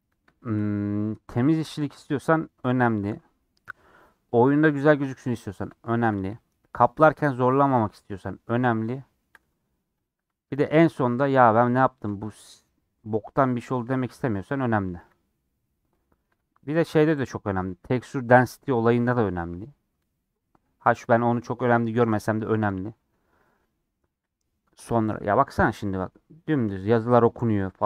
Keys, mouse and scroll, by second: 0.0 scroll up 1, 0.3 shift+middle click, 0.9-2.1 scroll up 2, 2.1 shift+click, 2.6 scroll down 2, 2.8 scroll up 1, 3.0 scroll down 2, 3.3 middle click, 4.1 scroll up 1, 4.3-7.6 middle drag, 7.6 click, 7.8-10.1 middle drag, 10.1 ctrl+click, 10.6 scroll down 1, 10.7 scroll up 1, 10.7 scroll down 1, 10.9-12.5 middle drag, 12.5-13.4 scroll up 2, 12.8 middle click, 13.4 shift+middle click, 14.3 click, 14.9 KP_Decimal, 15.5-15.8 scroll down 6, 15.8-17.2 middle drag, 17.2 ctrl+click, 17.6 scroll down 1, 22.0 a, 24.1 middle click, 24.5-25.0 scroll down 5, 25.0-26.6 middle drag, 26.6-27.2 scroll up 3, 27.2-27.8 middle drag.